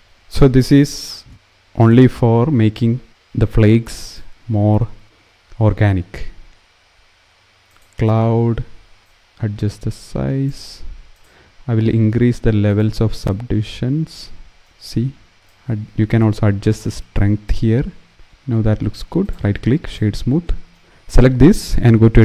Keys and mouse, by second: 0.0 BackSpace, 1.6-2.6 drag, 3.7-7.5 drag, 9.0-10.2 drag, 12.9-13.9 drag, 15.4-17.2 drag, 18.9 click.